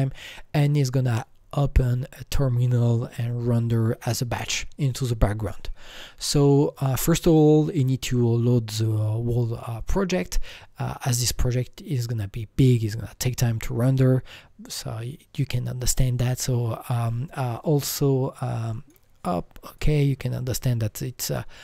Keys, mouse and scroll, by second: 6.7 right click, 6.7 click, 7.6 click, 7.6 right click, 18.4 right click, 18.7 click.